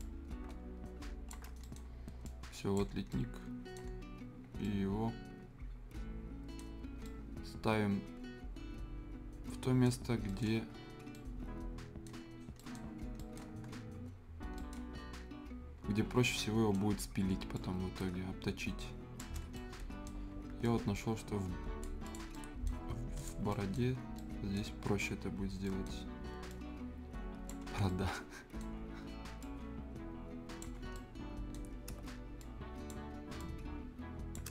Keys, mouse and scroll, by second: 0.0-1.4 drag, 1.4 shift+scroll down 1, 1.6 right click, 1.9 scroll up 1, 2.2 click, 2.9 scroll down 1, 3.1 right click, 3.9 scroll up 1, 4.4 scroll down 1, 4.6-6.7 right drag, 6.7 scroll up 1, 7.0-10.0 right drag, 10.0 scroll up 1, 10.3 right click, 10.5 scroll down 1, 10.9 scroll up 1, 11.1 right click, 12.1 scroll up 1, 12.6 right click, 13.0-13.6 scroll down 2, 13.2 right click, 13.2 right click, 13.6 scroll, 14.5 right click, 14.8 scroll down 1, 15.0-16.1 scroll up 1, 16.1 scroll down 1, 16.3 right click, 17.0 scroll up 1, 17.5-19.3 drag, 19.3 shift+scroll down 2, 19.5 right click, 20.2 scroll up 1, 20.6-22.0 drag, 22.2 scroll up 1, 22.3 right click, 22.8 scroll up 1, 23.2 click, 23.4 scroll up 1, 23.5 right click, 23.8 scroll down 1, 24.0 scroll up 1, 24.2 right click, 24.6 scroll down 1, 24.9-25.6 scroll up 1, 25.9 scroll up 1, 26.5 click, 27.6 scroll down 1, 27.9 right click, 28.7 scroll up 1, 29.4-30.8 drag, 30.8 scroll down 1, 30.9 right click, 31.6 scroll down 1, 32.0-32.4 shift+scroll up 1, 32.4-34.5 shift+drag.